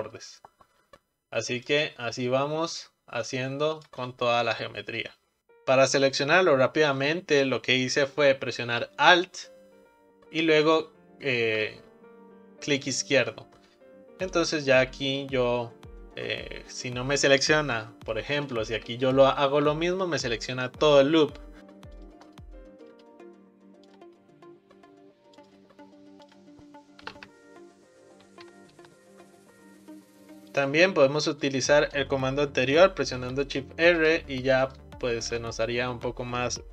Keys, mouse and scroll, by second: 5.4-7.0 right drag, 7.0 click, 10.7 alt+click, 14.3-17.3 right drag, 18.5 click, 19.1 alt+click, 22.0 shift+click, 22.9-25.5 right drag, 26.3-29.4 drag, 30.5 click, 31.4 shift+click, 33.3 shift+r, 33.9 click, 34.7 click, 35.5 alt+click.